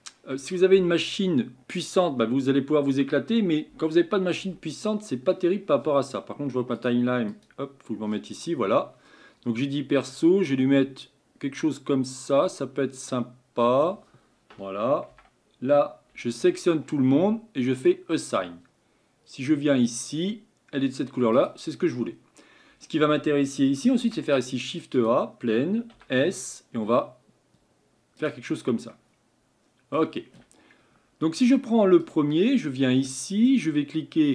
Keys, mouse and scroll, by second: 15.1 Tab, 17.8 click, 18.3 Tab, 28.9-32.1 middle drag.